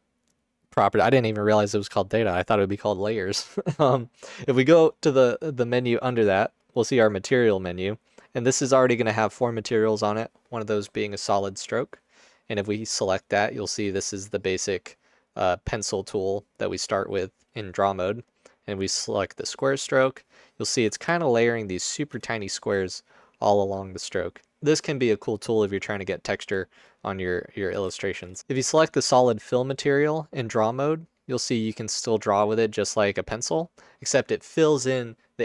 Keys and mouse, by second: 13.5-14.6 drag, 15.4 click, 28.5 ctrl+z, 31.7-32.9 drag, 33.5 click.